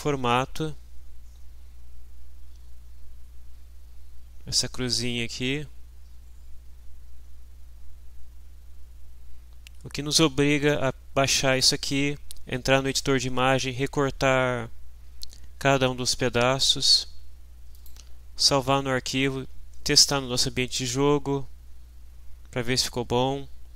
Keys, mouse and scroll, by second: 4.9 click, 17.8 click, 21.4-21.8 scroll down 1, 22.7-23.1 scroll down 1.